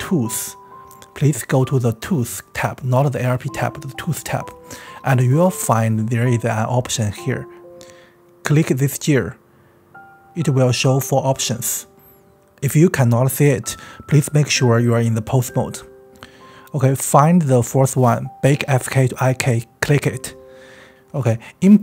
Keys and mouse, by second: 8.0 click, 19.6-21.8 drag.